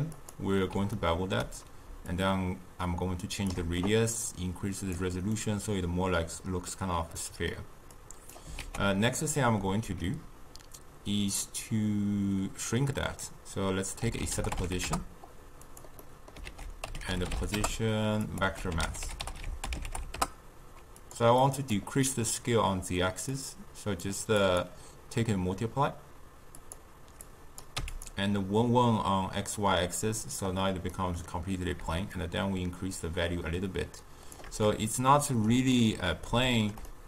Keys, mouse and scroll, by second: 0.1 ctrl+a, 0.9-2.1 ctrl+middle drag, 2.1-5.4 shift+drag, 5.4-15.6 middle drag, 24.0-30.3 drag, 31.0-32.3 middle drag, 32.3-34.8 shift+drag, 34.8-37.0 ctrl+middle drag.